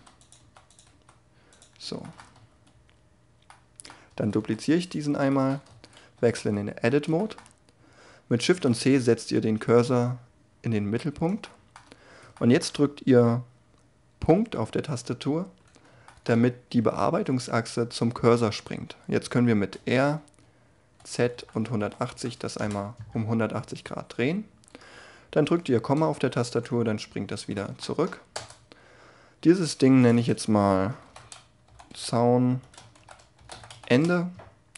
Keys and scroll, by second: 0.0-0.8 typing, 2.3 Tab, 4.3 shift+d, 5.6 Tab, 6.1 a, 8.4 shift+c, 19.2 r, 20.9 z, 21.3 1, 21.7 8, 22.1 0, 22.5 Return, 25.9 ,, 28.3 Tab.